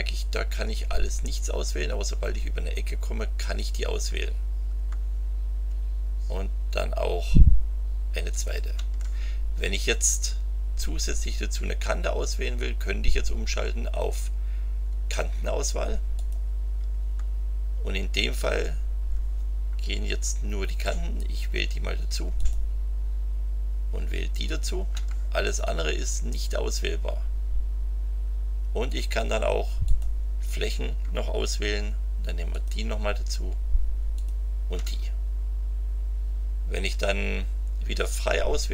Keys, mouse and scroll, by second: 3.5 click, 8.3 ctrl+click, 16.1 click, 22.3 ctrl+click, 24.4 ctrl+click, 29.8 click, 32.5 ctrl+click, 34.1 ctrl+click.